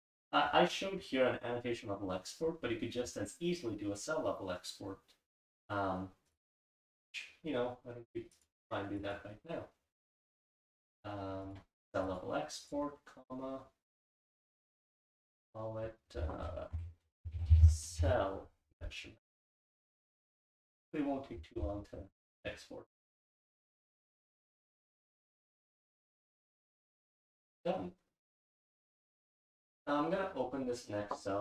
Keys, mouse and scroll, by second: 8.3 click.